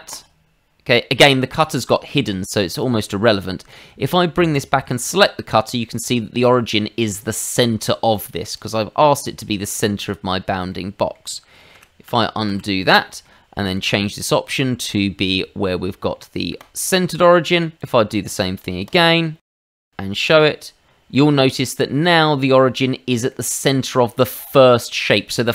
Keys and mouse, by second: 0.1 click, 2.7 click, 3.6 middle click, 4.5 click, 5.1 middle click, 8.5 click, 10.7 middle click, 11.7 ctrl+z, 12.0 ctrl+z, 12.5 ctrl+z, 13.1 shift+middle click, 13.6 click, 16.6 click, 16.8 shift+middle click, 17.2 middle click, 17.8 click, 19.4 middle click, 19.8 click, 20.3 click, 21.1 middle click, 23.3 middle click, 24.3 middle click.